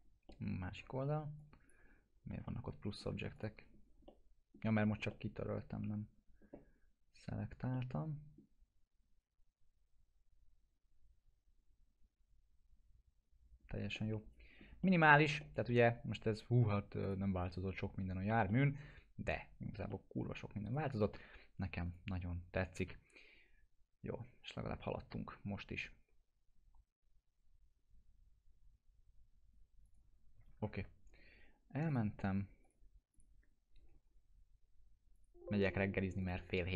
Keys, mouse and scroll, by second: 0.3-0.9 alt+middle click, 0.8 scroll down 1, 1.4 click, 1.9 alt+q, 2.5-3.1 alt+middle click, 3.3 click, 3.7 scroll up 1, 4.1-4.7 alt+middle click, 4.8 middle click, 5.1-5.7 alt+middle drag, 7.7-8.6 middle drag, 13.9-16.3 alt+middle click, 14.8 middle click, 15.7-17.0 alt+middle drag, 17.0 click, 17.7-18.3 click, 18.4-19.7 alt+middle click, 19.9-20.5 middle click, 20.6 right click, 20.9 click, 29.8 click, 30.6 ctrl+s, 31.9 click.